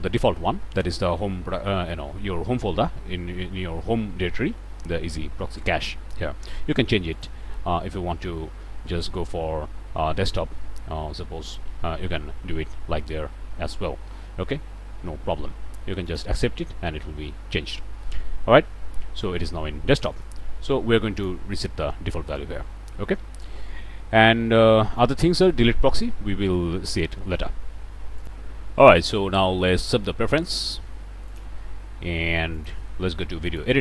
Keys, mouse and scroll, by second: 7.1 click, 11.4 click, 16.0 click, 20.1 right click, 21.1 click, 25.0 click, 28.2 click, 30.5 click, 31.3 click, 32.5 click, 33.5 click.